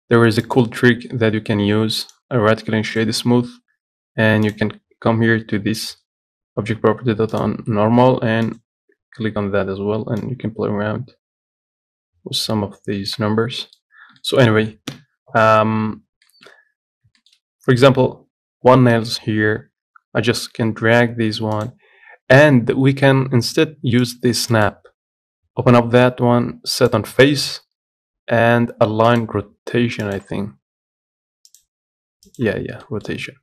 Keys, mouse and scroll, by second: 0.7 click, 1.2-1.5 scroll down 1, 1.5-2.0 scroll up 6, 3.2-8.8 right drag, 8.8-13.3 drag, 13.6 scroll down 1, 13.9 middle click, 14.2 scroll down 1, 14.5 shift+middle click, 15.2 KP_7, 15.8 scroll down 2, 16.3-16.6 scroll up 1, 16.6 shift+middle click, 17.2 scroll up 2, 17.5 shift+middle click, 17.7 scroll down 2, 19.0 scroll up 1, 19.3-20.6 scroll down 1, 20.6 g, 24.3-33.1 drag, 33.1 middle click, 33.3 scroll up 1.